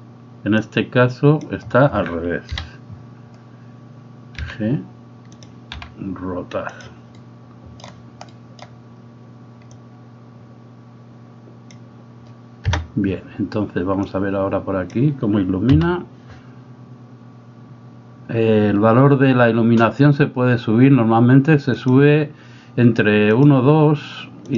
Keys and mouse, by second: 0.6 click, 2.5 KP_7, 4.4 g, 6.7 r, 7.3 middle click, 8.4 middle click, 9.7-11.9 drag, 12.7 KP_0, 14.1 click.